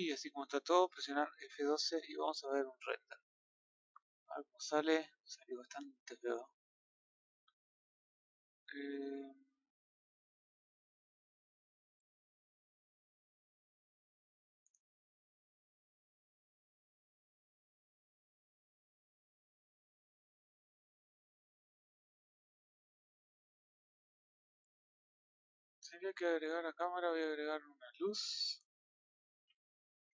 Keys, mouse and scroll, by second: 18.1-26.7 click, 26.9-27.6 middle drag, 27.6-28.2 scroll down 1, 28.2 scroll down 4, 28.2-30.1 middle drag.